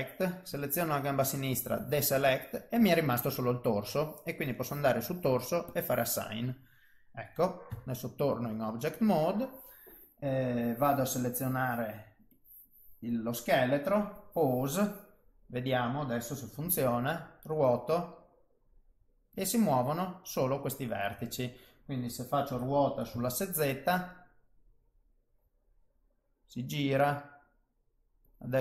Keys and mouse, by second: 0.6 click, 1.5 click, 2.3 middle click, 4.5 click, 5.6 click, 7.0 middle click, 8.9 Tab, 11.1 click, 12.3 click, 13.1 click, 15.1 middle click, 17.7 r, 21.0 middle click, 22.5 r.